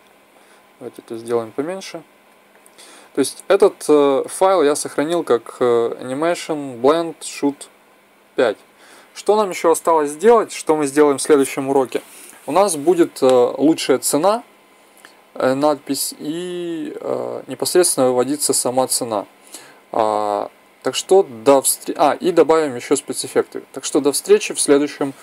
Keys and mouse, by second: 1.2 click, 1.4 click, 4.4 ctrl+s.